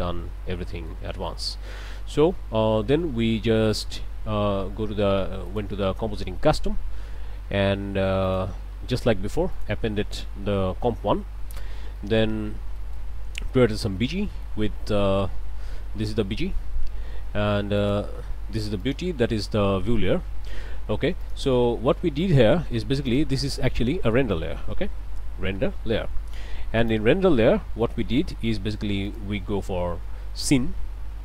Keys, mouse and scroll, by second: 0.5 alt+a, 0.9 alt+click, 1.0 alt+middle click, 5.4 click, 8.2 click, 9.5-11.6 drag, 11.6 scroll down 1, 12.0 click, 12.8 click, 13.1 scroll up 2, 14.2 click, 17.8 click, 18.8 click, 21.2 click, 21.6 click, 22.1 scroll up 1, 23.1 shift+click, 23.4 shift+a, 23.7 shift+click, 24.6 r, 24.7 e, 25.5 Return, 26.8 click, 27.3 click, 28.3 middle click, 29.1 click.